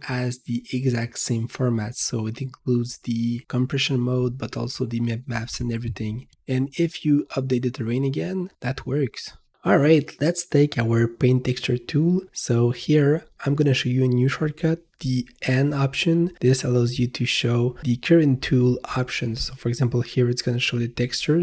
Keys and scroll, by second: 9.1 v, 14.1 n.